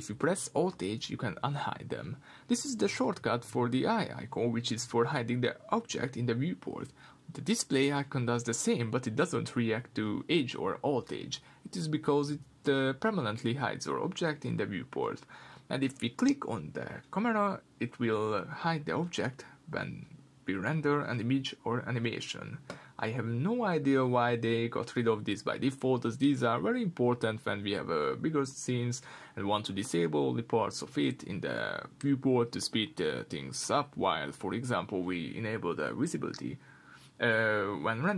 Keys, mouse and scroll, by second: 1.1-4.1 middle drag, 1.1 h, 2.6 alt+h, 4.1 click, 6.4-10.4 drag, 10.9 click, 13.1 h, 14.3 click, 14.6 click, 15.2 click, 17.3 click, 17.8 click, 18.1 click, 18.5 click, 19.7 click, 22.0 click, 22.9 click, 24.1 shift+click, 26.9 click, 30.9 click, 32.7 shift+click, 33.4-35.9 middle drag, 35.9 click, 36.2 click, 36.6-38.1 middle drag.